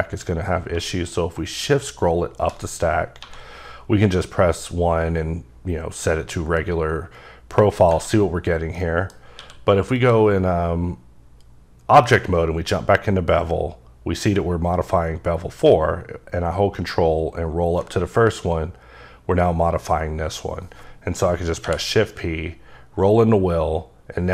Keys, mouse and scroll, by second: 0.8 shift+Num_Lock, 0.8 shift+middle click, 1.5-3.2 shift+scroll up 9, 3.7-5.0 scroll up 2, 7.8 click, 8.8 middle click, 9.4 q, 10.0 click, 15.7 ctrl+click, 16.2-17.0 ctrl+scroll up 2, 17.0 ctrl+scroll down 1, 18.0-20.3 scroll down 1, 21.0 scroll down 1, 21.6 shift+p, 22.5-23.3 scroll up 3, 23.3-24.1 scroll up 2, 24.1-24.3 scroll up 1.